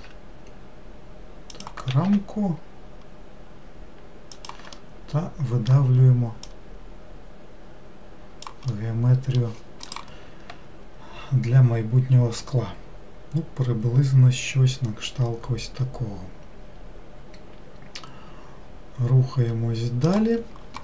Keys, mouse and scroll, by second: 4.8-6.5 middle drag, 6.5 click, 8.8-11.9 middle drag.